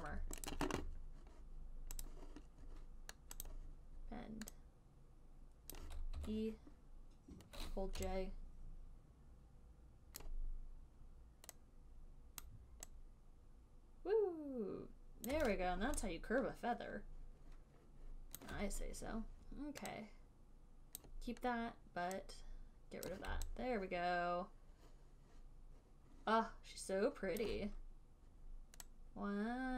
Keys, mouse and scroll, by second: 0.8 alt+click, 2.3 click, 3.8 click, 6.4 e, 8.3-15.7 typing, 10.5 click, 12.7 click, 15.6 click, 18.7 alt+click, 21.2 click, 23.4 click, 27.7 alt+click.